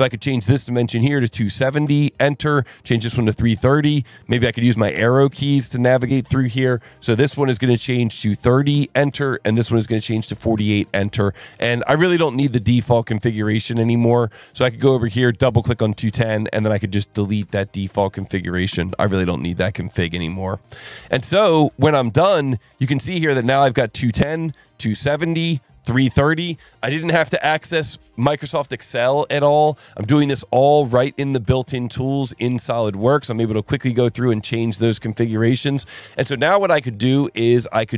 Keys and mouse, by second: 1.1 KP_2, 1.4 KP_7, 1.7 KP_0, 1.8 KP_Enter, 3.0 KP_3, 3.3 KP_0, 4.1 Right, 4.7 Up, 5.3 Down, 5.8 Up, 8.0 KP_3, 8.1 KP_0, 8.7 KP_Enter, 10.0 KP_4, 10.2 KP_8, 10.6 KP_Enter, 13.2 click, 14.5 click, 15.3 click, 16.7 click, 17.4 Delete, 18.7 KP_Enter, 20.6 click, 24.1 click, 26.1 click, 31.5 click, 32.6 click, 33.4 click, 34.2 click, 34.9 click, 35.8 click.